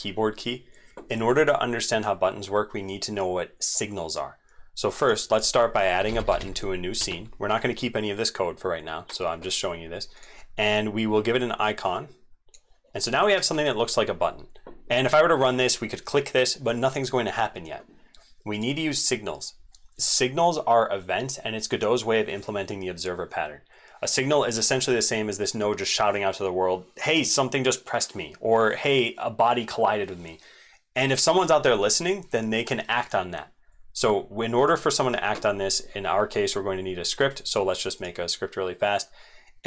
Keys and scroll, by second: 24.3 ctrl+s.